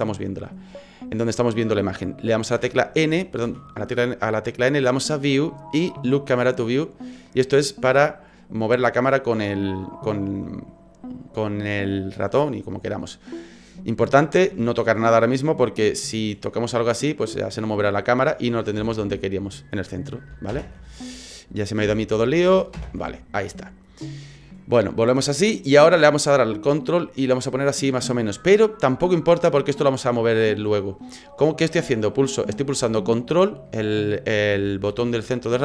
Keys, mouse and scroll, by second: 2.6 n, 3.1 n, 3.4 n, 5.2 click, 7.3 click, 16.5 middle click, 18.8 ctrl+z, 20.5 ctrl+alt+KP_0, 21.8 KP_1, 22.7 ctrl+alt+KP_0, 27.0 ctrl+middle click.